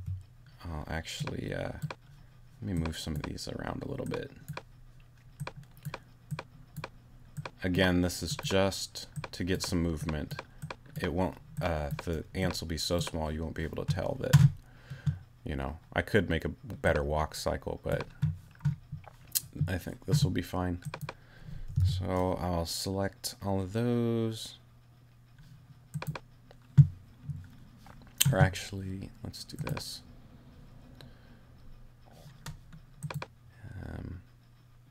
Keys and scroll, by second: 21.8 super+a.